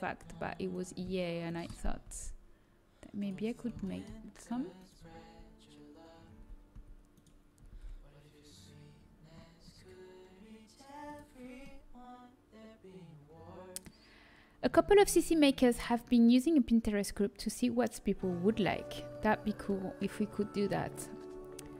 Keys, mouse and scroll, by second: 2.0 g, 6.3 z, 6.7 z, 7.6 g, 11.7-12.8 middle drag, 13.0 middle click.